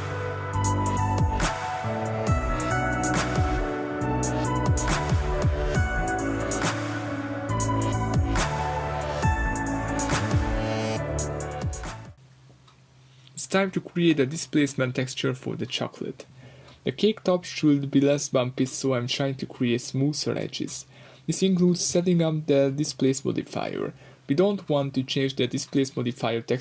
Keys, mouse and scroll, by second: 1.9 click, 2.8-5.3 shift+drag, 5.3-11.2 middle drag, 10.9-11.2 scroll down 2, 11.2 click, 11.5-12.2 middle drag, 12.2 click, 12.5-18.6 middle drag, 14.1 scroll up 2, 15.6-16.0 scroll up 2, 18.6 click, 21.0 click, 24.6-26.6 drag, 26.5 alt+F9.